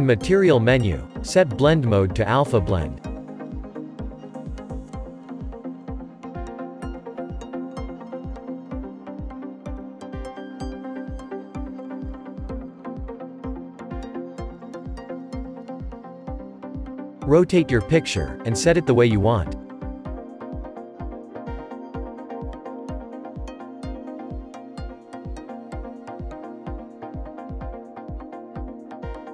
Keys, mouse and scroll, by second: 3.1 click, 13.9 shift+middle click, 14.9-15.3 scroll down 3, 15.3-17.1 middle drag, 17.1 r, 19.9-21.0 shift+middle drag, 21.0 s, 21.8 scroll up 3, 22.4 middle drag, 22.7 scroll up 1, 23.0-23.6 middle drag, 23.6 g, 25.8 s, 27.8 g.